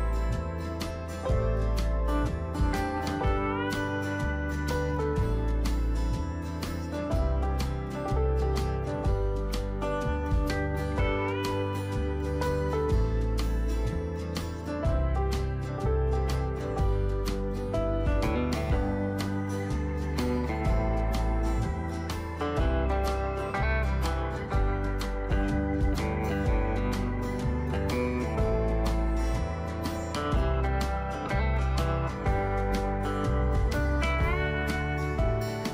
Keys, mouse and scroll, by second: 4.6-35.7 drag.